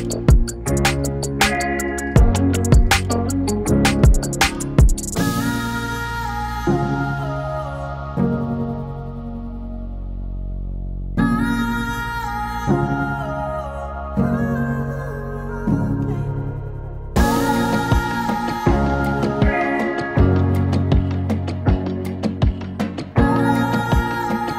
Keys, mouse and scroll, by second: 0.9-2.6 drag, 3.3 right click, 4.5 click, 7.9 space, 9.5 space, 11.4 click, 13.8 ctrl+z, 14.6 p, 16.5-20.6 drag, 20.6-24.5 drag.